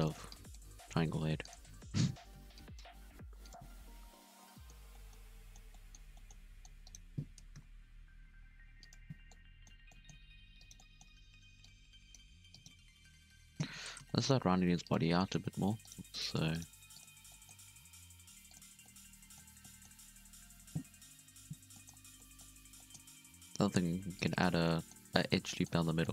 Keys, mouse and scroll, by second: 0.2 click, 0.5 g, 1.6 z, 2.2 z, 2.5 click, 2.9 g, 3.6 z, 4.0 scroll down 2, 4.2 Tab, 4.4-6.3 middle drag, 6.3 scroll up 1, 6.4 middle click, 6.6 Tab, 6.8 right click, 7.5 KP_1, 8.1 g, 9.1 scroll down 1, 9.3-10.6 middle drag, 10.6 right click, 10.7 middle click, 11.2 alt+a, 11.6 click, 12.5 right click, 13.2 KP_7, 14.0 shift+middle click, 14.2-14.5 scroll up 1, 14.5 g, 15.2 shift+middle click, 15.3-15.8 scroll down 1, 15.8 right click, 16.0 g, 16.5 right click, 16.7 g, 17.2 scroll down 1, 17.3 shift+middle click, 17.6-17.9 scroll up 2, 17.9 g, 18.7 scroll down 4, 18.8-19.9 middle drag, 19.9-21.1 scroll up 2, 21.1 KP_3, 21.7 shift+middle click, 21.9 scroll up 1, 22.0 scroll down 2, 22.1 middle click, 22.5 alt+a, 22.7 middle click, 23.3 ctrl+r, 24.5 scroll down 1, 24.6 middle click, 25.0 scroll up 2, 25.2 alt+a, 25.4 middle click.